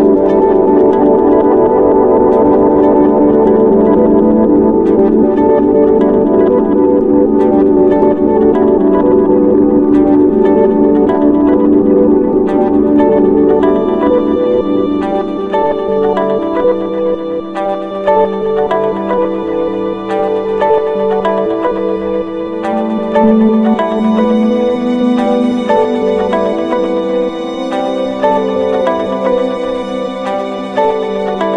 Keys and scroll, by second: 7.1 ctrl+z, 9.7 Left, 10.0 ctrl+=, 15.2 ctrl+-, 15.8 ctrl+z.